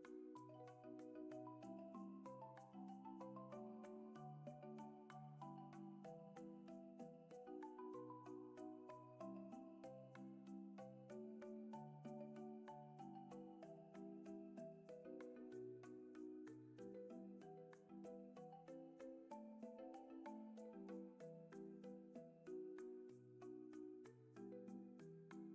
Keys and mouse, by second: 2.7 F6, 4.9-6.5 drag, 8.8 click, 9.8-17.8 drag, 19.0-22.6 drag.